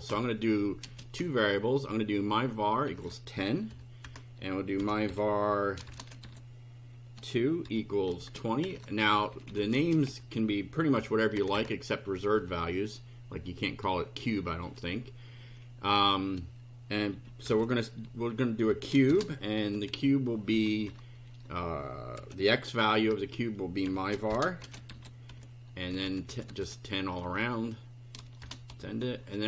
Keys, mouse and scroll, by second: 0.9 space, 2.9 KP_1, 3.0 KP_0, 3.7 ;, 4.0 Return, 4.8-9.8 typing, 10.1 End, 10.9 ;, 11.3 Return, 17.2-20.4 typing, 20.5 Left, 22.2 m, 23.6-27.2 typing, 27.4 End, 28.2-29.2 typing.